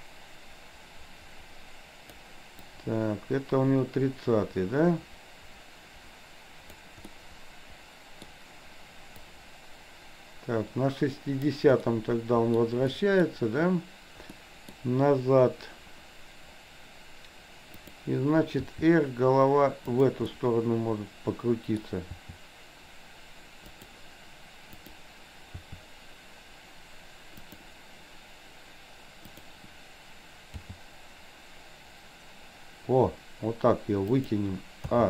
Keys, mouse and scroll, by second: 2.8-6.7 drag, 7.2-8.2 middle drag, 9.3 click, 11.8-12.7 middle drag, 13.0 middle click, 14.3-14.8 middle drag, 17.7 click, 18.7 r, 20.3-21.8 middle drag, 22.2 r, 24.7 click, 25.6 r, 29.3 click, 30.7 g, 34.8 a.